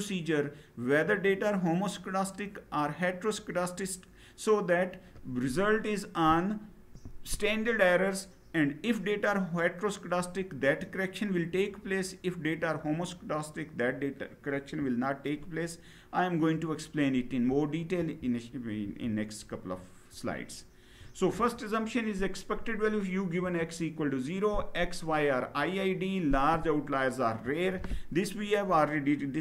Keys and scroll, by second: 17.7 Down.